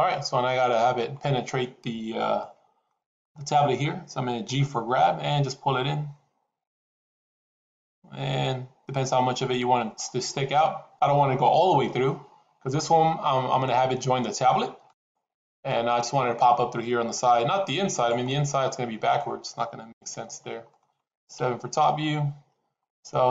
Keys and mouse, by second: 2.3 shift+middle click, 4.8 g, 11.5 g, 17.2 g, 18.2 middle click, 19.8 ctrl+z, 20.6 middle click, 21.2 KP_7.